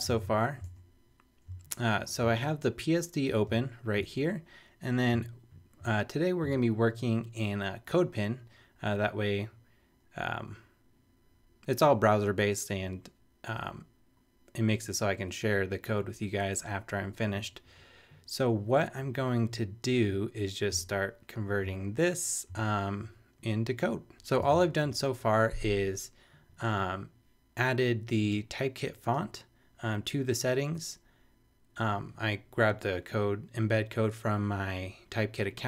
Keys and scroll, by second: 0.1 super+Tab, 2.2 super+space, 4.0 super+Tab, 20.8 super+Tab, 24.4 super+Tab.